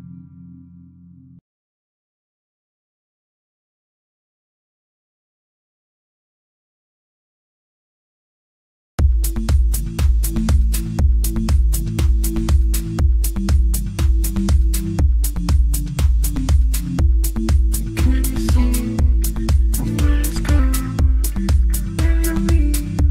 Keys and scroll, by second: 12.9 ctrl+z.